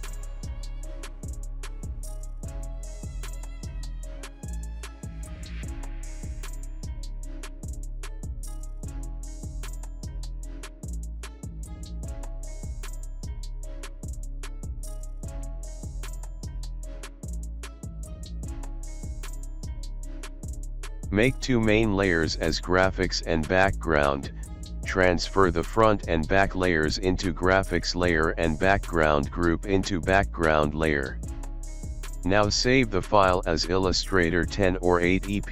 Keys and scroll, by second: 32.9-35.5 typing.